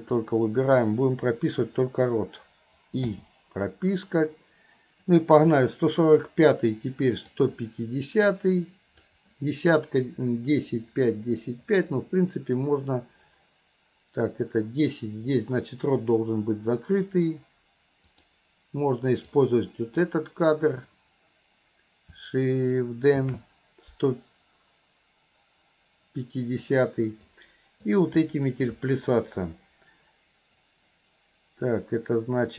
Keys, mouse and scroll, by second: 0.2-1.0 drag, 7.5-9.2 drag, 18.2 click, 19.3-20.1 drag, 27.3-28.0 drag.